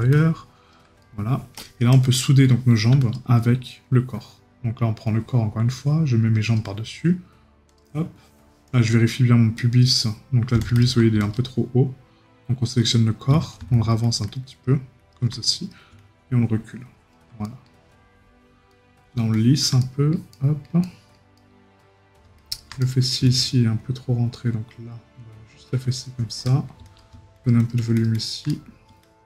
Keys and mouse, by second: 1.0 right click, 17.4 right click, 18.7 right click, 22.8 right click, 26.4 right click, 28.5 right click.